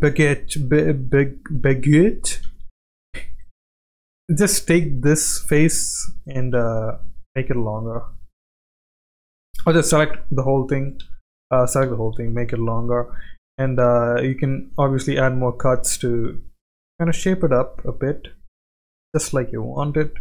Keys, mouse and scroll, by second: 2.4 ctrl+z, 2.9 middle click, 4.3 middle click, 4.5 3, 4.6 click, 5.2 middle click, 6.0 middle click, 6.6 g, 8.5 middle click, 9.1 ctrl+z, 9.6 s, 11.0 ctrl+z, 11.3 a, 11.8 s, 14.5 ctrl+r, 17.4 click, 19.3 middle click.